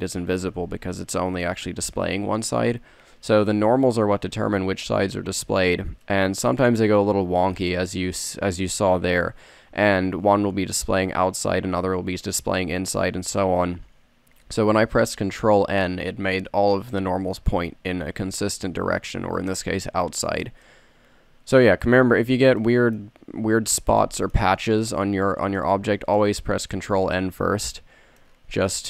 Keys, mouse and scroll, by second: 3.6 a, 14.7-16.4 middle drag, 20.4 Tab.